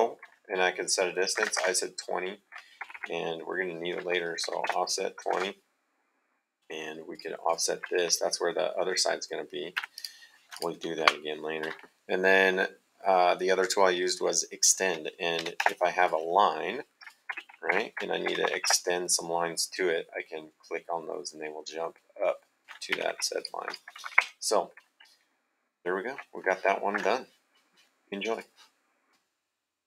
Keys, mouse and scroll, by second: 1.4 KP_2, 1.4 KP_0, 2.8 Escape, 4.4 o, 4.6 space, 5.0 KP_2, 5.2 KP_0, 7.1 click, 9.8 Escape, 9.9 click, 11.0 Delete, 15.6 space, 15.9 click, 17.3 Escape, 18.2 e, 18.4 x, 18.6 space, 22.9 Escape, 23.3 click, 24.1 Delete, 27.0 super+Tab, 28.5 click.